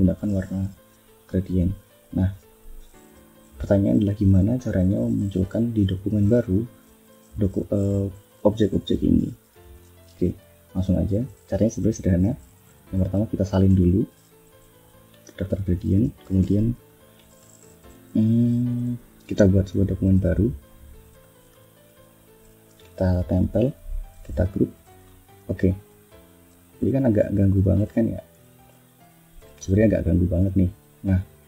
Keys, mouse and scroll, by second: 0.2 click, 1.0 click, 1.8 click, 7.0 click, 7.6 click, 8.1 click, 8.5 click, 8.9 click, 9.4 click, 9.9 shift+scroll down 2, 10.2 shift+click, 10.7 ctrl+shift+scroll down 3, 12.0 click, 13.5 ctrl+c, 14.7 click, 16.2 ctrl+n, 19.4 click, 20.5 click, 21.1 click, 21.7 ctrl+v, 23.4 ctrl+g, 24.2 click, 24.9 ctrl+scroll up 2, 25.6 ctrl+click, 26.5 ctrl+click, 27.4 ctrl+click, 28.5-29.5 ctrl+drag.